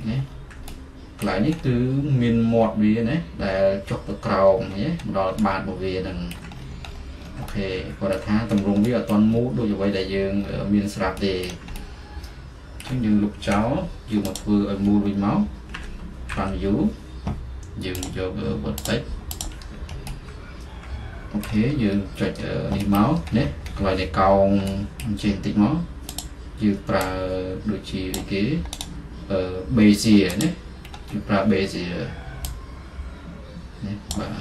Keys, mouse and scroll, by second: 1.6-5.5 middle drag, 4.6-5.4 scroll, 6.6 middle click, 6.6-7.3 scroll, 8.6-11.8 middle drag, 13.6 Delete, 14.4-15.8 drag, 15.8 f, 16.4 z, 18.1-21.6 drag, 23.1-33.2 middle drag, 23.8-24.4 scroll up 4, 24.4-25.1 scroll up 1, 25.1-26.3 scroll up 1, 26.3-28.9 scroll up 1, 28.9-30.4 scroll up 1, 30.4-30.9 scroll up 1, 30.9-33.0 scroll up 2, 33.0 scroll up 1, 34.2-34.4 drag.